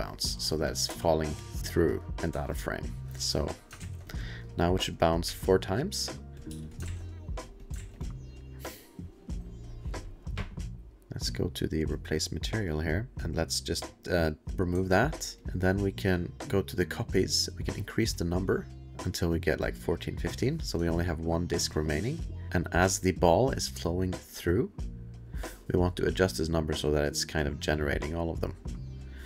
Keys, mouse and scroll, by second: 0.4 click, 0.5 click, 0.7 click, 0.9 space, 2.3 space, 2.9 click, 3.0 middle click, 3.0 click, 3.0 2, 4.0 click, 4.8 alt+middle click, 5.5 2, 5.6 2, 6.2 click, 6.3 click, 6.5 space, 6.8 ctrl+s, 7.4 click, 7.6 click, 7.8 ctrl+s, 8.0 click, 10.9 click, 11.6 click, 13.1 click, 13.7 click, 15.4 click, 16.3 click, 17.5 click, 20.8-21.7 alt+scroll, 22.5 alt+click, 22.8 alt+click, 27.0 alt+click, 28.5 alt+click, 29.1 alt+click.